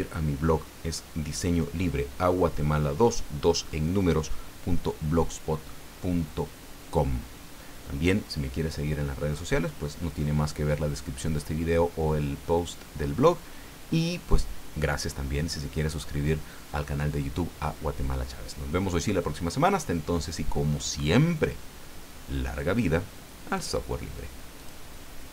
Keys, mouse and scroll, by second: 24.6 click.